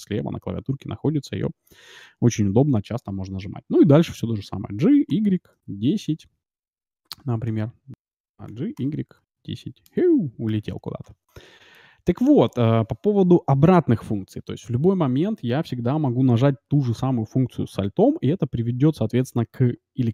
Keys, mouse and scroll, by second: 8.4 g, 10.4 KP_Decimal, 11.2-13.4 middle drag, 13.6 middle click.